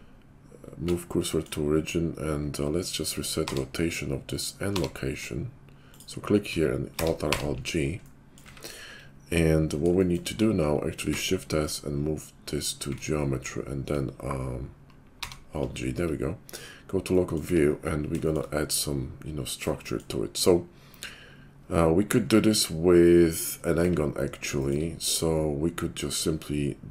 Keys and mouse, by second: 3.4 alt+r, 4.8 alt+g, 5.8 click, 6.9 alt+r, 7.3 alt+g, 8.4 `, 11.0 shift+s, 15.2 alt+g, 16.5 /, 17.5 `, 18.5-26.9 middle drag.